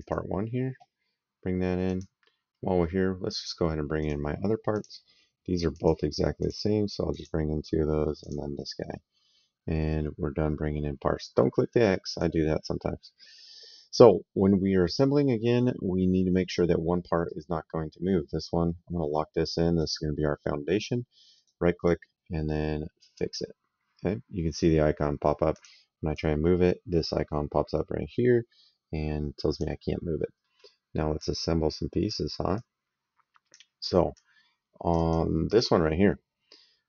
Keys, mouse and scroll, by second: 1.7 click, 3.8 click, 8.0 click, 11.9 click, 13.1 middle click, 17.0 click, 21.1 right click, 23.0 click, 25.3 click, 30.3 middle click, 31.0 click, 32.3 click, 34.0 click.